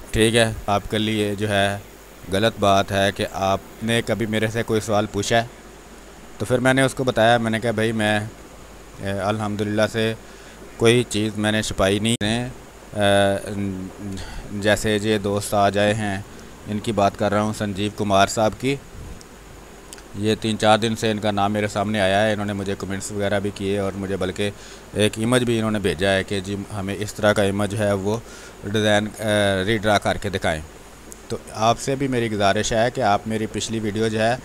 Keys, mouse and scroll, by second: 0.6 b, 0.6-6.6 ctrl+drag, 6.6 space, 8.6 alt+click, 10.6 ctrl+click, 12.1-14.1 drag, 14.1 space, 18.5 space, 18.7 click, 19.0 space, 19.9 click, 22.1 space, 22.7 click, 23.9 space, 26.1 r, 26.3-27.8 drag, 27.8 b, 28.1 space, 28.2-34.4 drag.